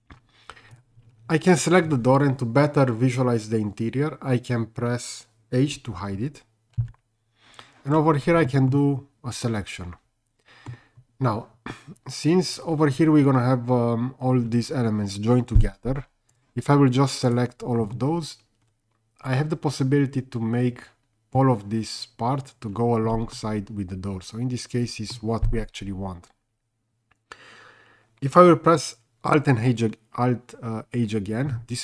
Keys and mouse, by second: 6.8 h, 8.7-10.7 middle drag, 12.5 click, 17.9-21.4 middle drag, 23.3-25.1 middle drag.